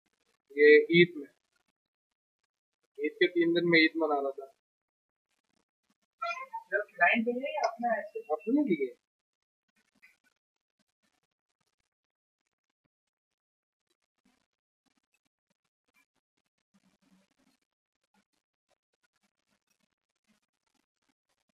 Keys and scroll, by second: 6.4-9.7 typing, 10.3 Return.